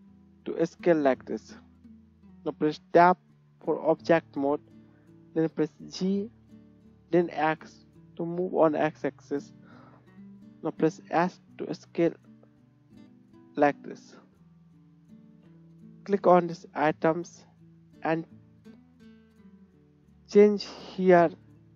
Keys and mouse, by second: 3.1 Tab, 5.2 g, 6.2-8.7 right drag, 9.6 shift+middle click, 10.8-11.7 drag, 10.8 s, 11.7-14.3 right drag, 14.3-14.8 drag, 15.4-21.7 drag, 15.8 middle click, 15.8 right click, 20.4-21.7 middle drag, 20.4-21.7 right drag.